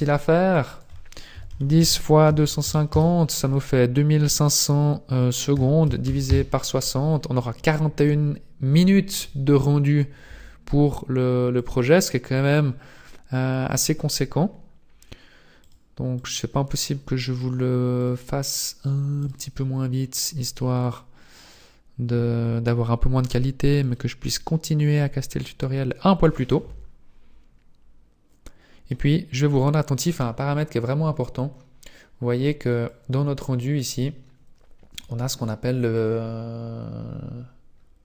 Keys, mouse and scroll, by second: 16.4 click, 18.0 click, 21.2 click, 21.5 click, 23.2 click, 29.3 scroll up 1, 32.7 click, 33.7-35.8 scroll up 1, 36.2-37.3 scroll up 1, 37.3-38.0 scroll down 2.